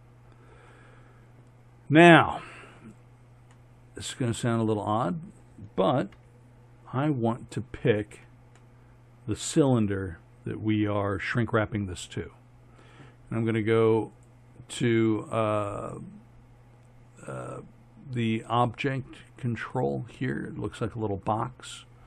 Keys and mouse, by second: 6.2 z, 7.0 right click, 7.6-8.1 drag, 8.1 z, 8.8-10.6 middle drag, 14.2-17.7 drag.